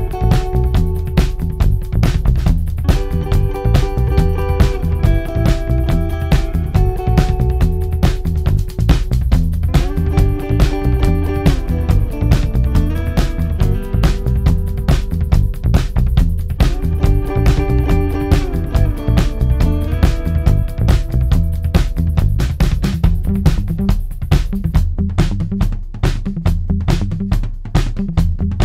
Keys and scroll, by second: 1.2 4, 9.0 2, 9.6 ], 11.7 4, 17.2-25.8 typing.